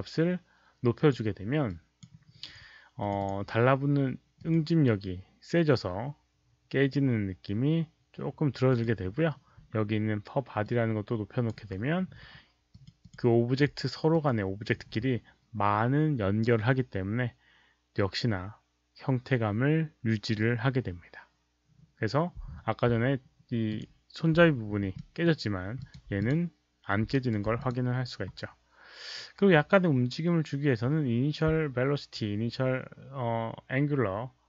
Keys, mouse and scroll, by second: 1.6 click, 2.9 click, 4.3 click, 8.6 click, 10.6-11.4 drag, 12.7 click, 14.1 click, 19.5 click, 23.5 click, 23.7 click, 24.3 middle click, 24.5-24.9 alt+scroll up 2, 24.9 alt+middle click, 25.7 alt+click, 26.1 click, 27.1 alt+right click, 27.5 alt+click, 31.1 alt+middle click.